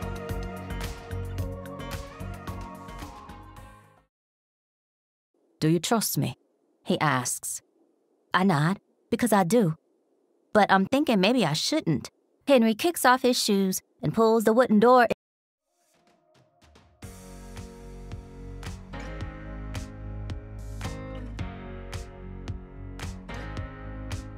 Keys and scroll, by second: 0.8 t, 1.6-3.6 shift+scroll, 3.6 shift+r, 4.7 r, 4.8 Return, 5.4 t, 7.3 r, 11.5 r, 14.9 space, 16.1 t, 18.5 shift+3, 19.6 3, 20.2 r.